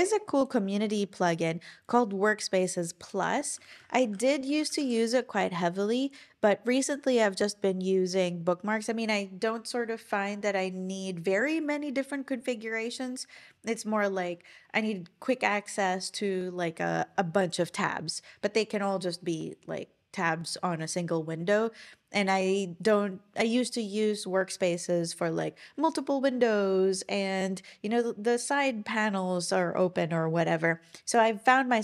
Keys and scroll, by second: 3.0-5.1 typing.